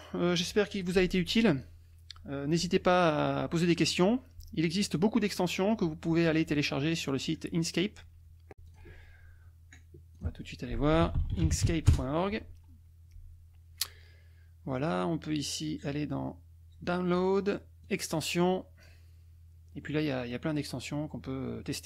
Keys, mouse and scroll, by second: 8.6 click, 10.2 click, 10.7-12.1 typing, 17.8 click, 19.5-19.9 scroll down 2.